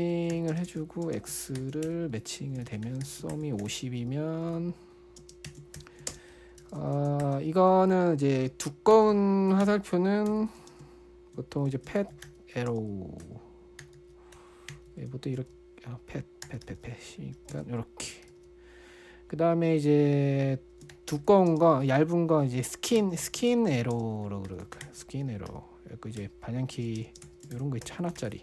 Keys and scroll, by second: 0.0-7.6 typing, 2.2 Return, 9.3-19.2 typing, 21.1-28.4 typing.